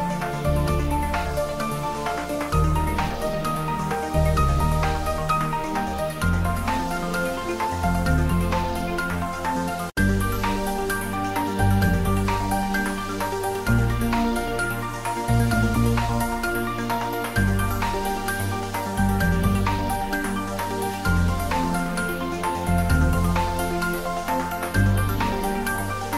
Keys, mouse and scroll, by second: 0.0-0.7 typing, 1.1 click, 1.4 ctrl+z, 2.0 r, 3.9 click, 5.7-9.1 typing, 6.6 click, 8.8 click, 9.9 click, 10.1 ctrl+z, 10.6 r, 12.3 click, 12.6 shift+z, 13.1 middle click, 13.6-14.6 typing, 14.6-16.7 ctrl+middle drag, 16.7 ctrl+s, 17.0 ctrl+middle click, 17.9-20.8 typing, 18.4 click, 19.7 click, 21.0 click, 22.7 shift+a, 23.6 click, 24.2 ctrl+z, 25.0 shift+a, 26.0 click.